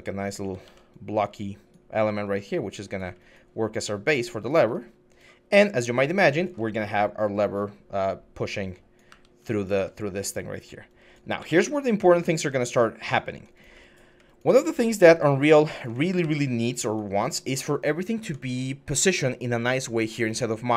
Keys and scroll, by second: 0.4 ctrl+z, 8.9 w, 11.2-12.1 typing, 16.0 w.